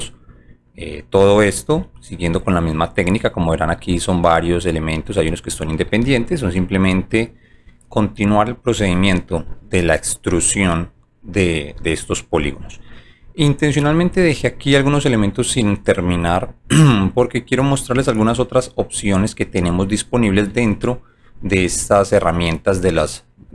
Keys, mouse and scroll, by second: 0.7 alt+middle click, 2.8 alt+click, 3.9 scroll up 1, 5.3 alt+middle click, 6.0 scroll up 1, 6.8 alt+click, 9.3 click, 13.0 alt+click, 13.4 alt+middle click, 14.7-16.1 alt+drag, 16.4 alt+middle click, 17.1 alt+middle click, 18.4 alt+click, 18.9 alt+middle click, 19.6 alt+click, 20.1 alt+middle click.